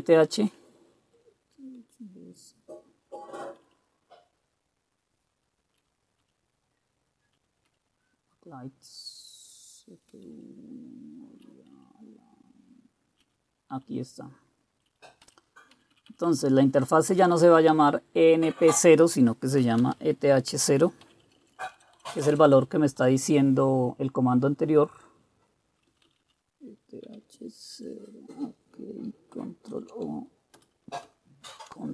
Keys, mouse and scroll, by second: 0.6-7.5 Down, 7.8-9.0 Down, 9.3-10.1 Down, 10.4-11.5 Down, 11.9-13.3 Down, 14.0-14.9 Up, 14.4-15.3 typing, 15.3 Down, 15.8 Right, 16.1 Right, 16.2 Right, 16.3-17.5 Right, 17.9 Left, 19.5-21.2 typing, 21.4 Delete, 21.6 Delete, 21.7 Delete, 21.9 Delete, 22.1 Delete, 22.3 Delete, 22.4 Delete, 22.6 Delete, 23.1 Delete, 26.0 Left, 26.2 Left, 26.3 Left, 27.2 t, 27.4 Right, 27.8 Delete, 29.8 ctrl+o, 30.7 Return, 31.6 ctrl+x, 31.6 typing.